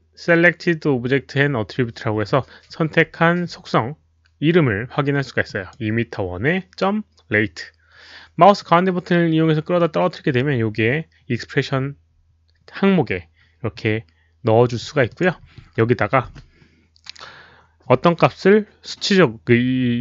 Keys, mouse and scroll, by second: 5.4 click, 8.6-9.7 middle drag, 15.0 click, 16.3 space.